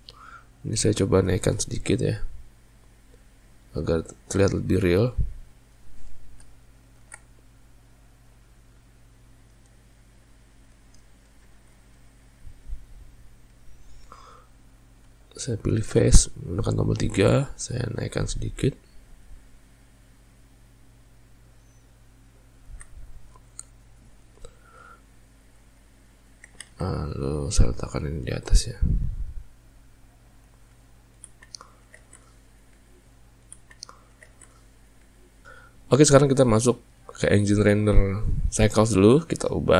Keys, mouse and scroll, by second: 0.7 click, 5.5 click, 6.2 alt+shift+click, 7.1 ctrl+b, 10.9 middle click, 11.6 alt+a, 11.9-14.9 middle drag, 16.0 3, 16.8 click, 17.7 middle click, 18.6 click, 21.7-22.8 middle drag, 22.8 alt+a, 23.1-24.9 middle drag, 26.1 ctrl+middle click, 26.7 Tab, 28.1 click, 29.4-30.8 middle drag, 31.6-32.1 ctrl+middle drag, 32.1 alt+a, 32.4-35.0 middle drag, 35.0 z.